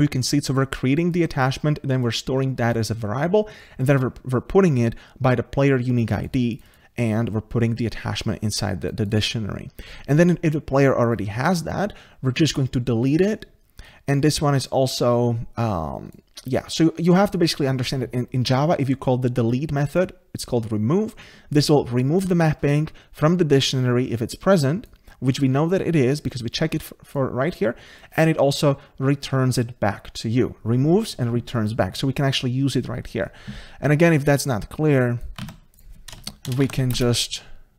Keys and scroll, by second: 35.4 ctrl+c.